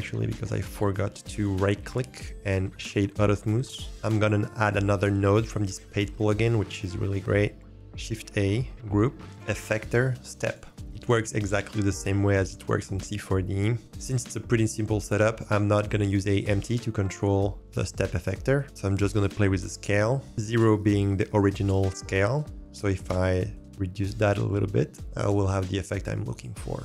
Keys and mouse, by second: 2.1-3.2 drag, 8.4 shift+a, 19.5 click, 22.5 click, 23.5-25.7 drag.